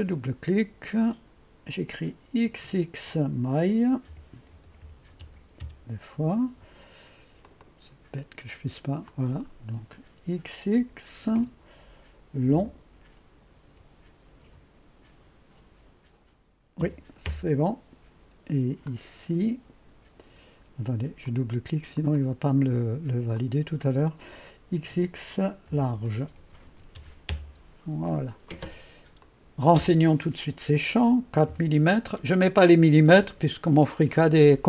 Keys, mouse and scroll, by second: 0.3-1.0 drag, 1.2-2.3 drag, 2.5 typing, 4.1-5.0 typing, 5.2 Return, 5.6 Return, 7.5-8.8 drag, 9.1-11.2 drag, 11.0-12.6 typing, 13.6-14.4 typing, 16.8 Return, 17.3 Return, 18.6-19.4 typing, 18.9 click, 21.3 click, 22.0 click, 23.4 click, 24.5-27.4 typing, 29.2 click, 31.5-32.2 typing.